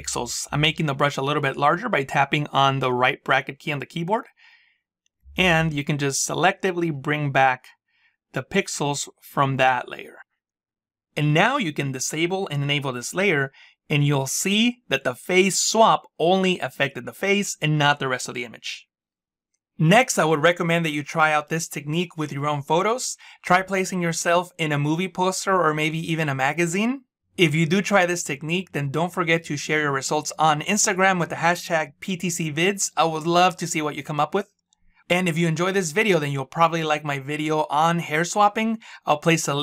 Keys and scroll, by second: 1.1 [.